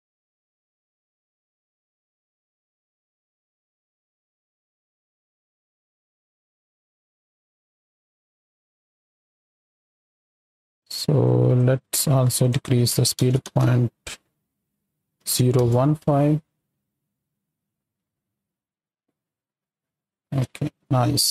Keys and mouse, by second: 2.1 space, 5.6-7.5 drag, 9.7 space, 11.2 click, 12.4-15.5 drag, 16.0 space, 16.9 click, 20.3 space, 20.5 click.